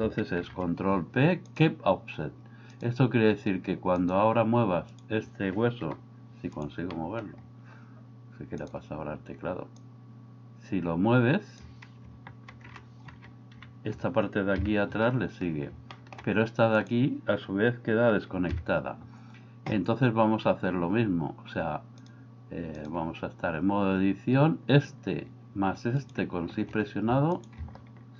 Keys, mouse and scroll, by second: 0.4 ctrl+p, 2.7-4.2 drag, 5.9 g, 6.9 middle click, 8.6 click, 9.8-11.7 drag, 12.5 ctrl+z, 13.6 KP_1, 14.5 KP_3, 15.9 middle click, 18.5 KP_3, 22.1 click.